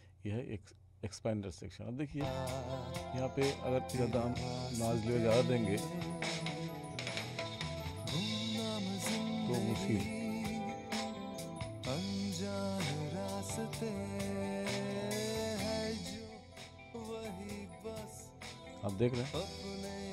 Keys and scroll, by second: 2.2 space.